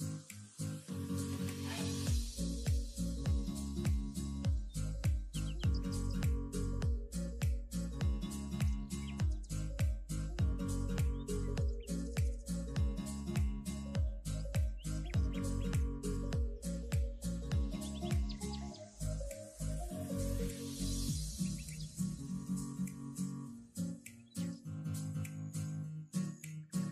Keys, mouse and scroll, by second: 0.5 shift+click, 0.9 shift+click, 1.2 shift+click, 1.4-2.1 middle drag, 2.1 KP_3, 3.7 shift+click, 3.9 shift+click, 4.3-5.5 middle drag, 5.5 scroll down 1, 5.8 KP_3, 6.3 ctrl+z, 6.8 ctrl+z, 7.1 shift+click, 7.4 shift+click, 8.1 KP_1, 8.8 shift+KP_3, 10.0 ctrl+KP_1, 10.9 ctrl+KP_3, 11.7 shift+click, 12.0 shift+click, 12.4 ctrl+KP_7, 13.2 shift+click, 13.4 shift+click, 13.9 scroll up 1, 15.4-16.0 middle drag, 16.0 scroll down 2, 16.1 middle click, 16.8-18.4 middle drag, 18.4-19.7 scroll up 1, 19.7 ., 21.0 ,, 21.9 middle click, 22.4 e, 24.5 ctrl+z, 24.9 KP_1, 25.2 e.